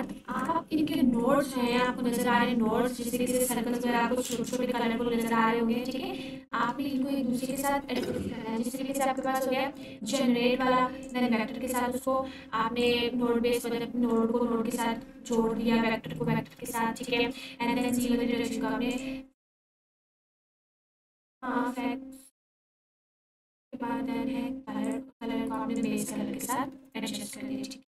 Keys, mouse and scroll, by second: 0.3 Return, 1.7 click, 4.3 ctrl+space, 7.8-8.1 alt+shift+click, 10.3-11.2 drag, 13.1-14.4 drag, 17.8-19.1 drag, 22.8-23.4 drag.